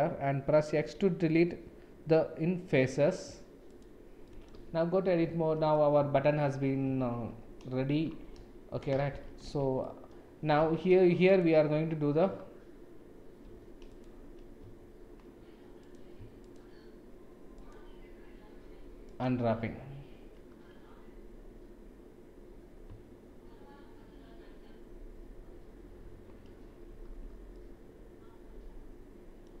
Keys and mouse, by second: 4.2 middle click, 4.5 Tab, 5.1-5.7 middle drag, 7.0 shift+z, 9.0 shift+z, 9.4 Tab, 9.8 click, 13.4 2, 15.8 click, 16.4 shift+click, 17.5 shift+click, 19.0 shift+click, 27.5-29.4 drag.